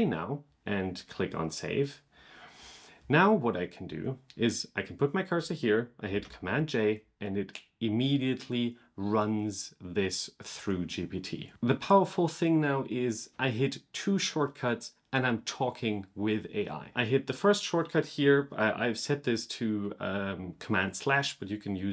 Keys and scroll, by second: 6.0 super+j.